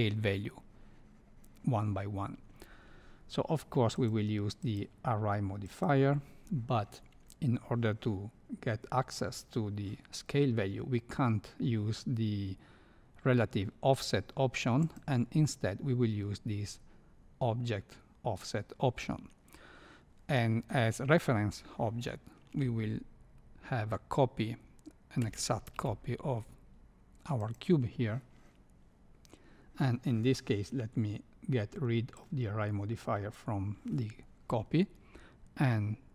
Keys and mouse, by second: 4.7-5.8 drag, 14.8 click, 25.2 shift+d, 32.1 click.